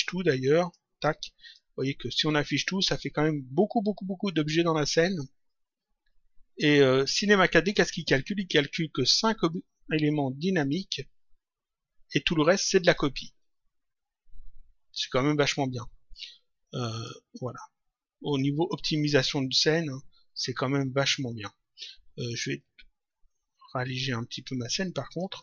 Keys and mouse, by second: 0.5 ctrl+click, 2.0 click, 10.5 click, 12.8 click, 16.8 click, 18.2 click, 23.8 click.